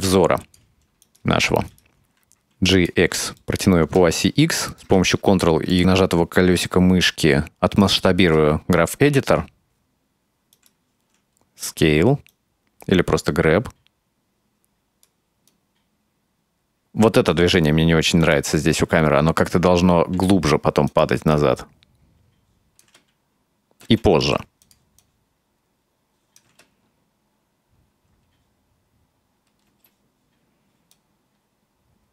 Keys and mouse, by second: 1.1 right click, 1.7 right click, 2.2 g, 3.5 middle click, 4.2 middle click, 5.1 shift+middle click, 7.7-10.3 drag, 10.6 right click, 11.1 s, 12.3-14.3 right drag, 14.5-17.3 drag, 18.2 right click, 20.2 g, 21.3-22.8 drag, 22.9 space, 23.9 space, 24.2 g, 25.0-26.5 drag, 26.5 space, 29.7 space, 30.7-32.1 drag.